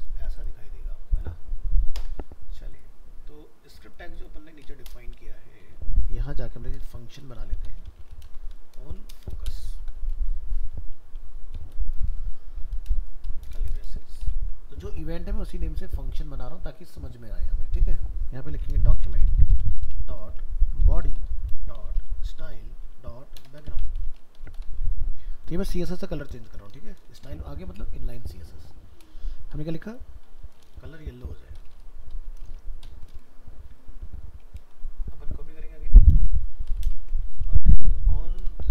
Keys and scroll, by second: 30.9 ctrl+Left, 36.1 ctrl+c, 37.0 ctrl+v.